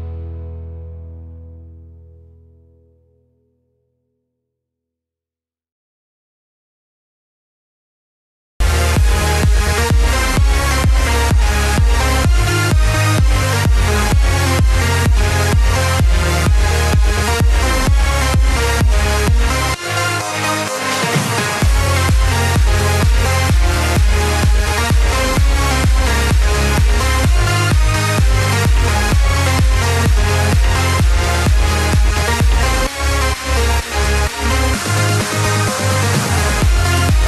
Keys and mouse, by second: 3.4 KP_3, 8.8 alt+click, 10.9 s, 15.6 click, 17.6 r, 20.2 click, 22.1 s, 25.0 click, 25.8 F9, 28.5 ctrl+KP_7, 31.0 Home, 32.8 middle click, 34.4 middle click, 36.1 shift+middle click.